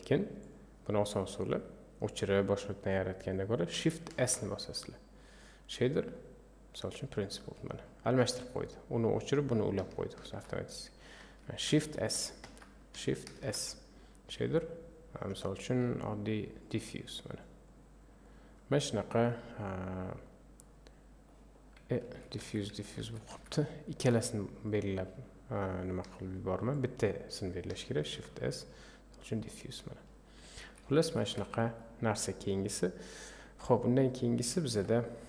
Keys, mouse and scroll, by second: 0.5 click, 6.8 shift+s, 7.3 click, 12.0 a, 17.8 click, 20.6-22.1 drag, 22.1 ctrl+z, 22.4 ctrl+z, 24.2-26.8 drag, 29.4 shift+s, 30.0 click, 30.6 ctrl+z, 31.0 ctrl+z.